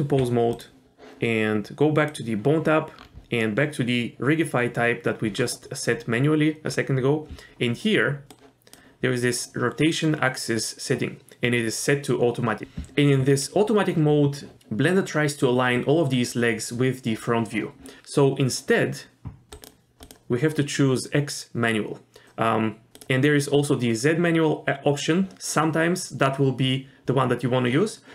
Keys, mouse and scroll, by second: 0.5 click, 2.1 click, 3.0-4.2 scroll down 3, 5.4-6.2 scroll down 1, 6.7-7.9 scroll down 1, 7.9-8.3 scroll down 1, 8.3 click, 19.5 click, 20.0-22.3 drag, 22.9-25.3 drag.